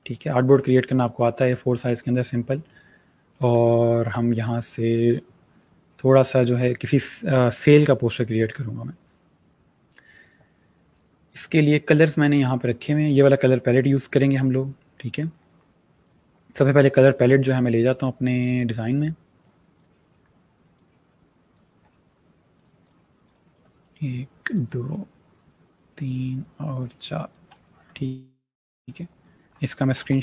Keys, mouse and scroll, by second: 0.4 space, 0.5 click, 1.0 space, 3.4 space, 3.5 click, 3.9 space, 4.5 click, 7.9 click, 10.8 click, 15.9 click.